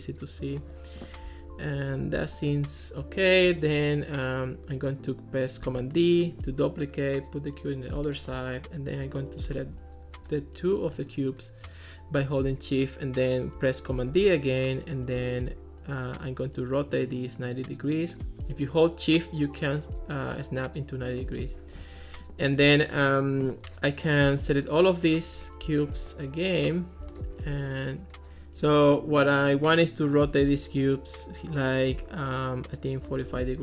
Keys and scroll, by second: 5.7 super+d, 14.1 super+d, 28.3 super+z.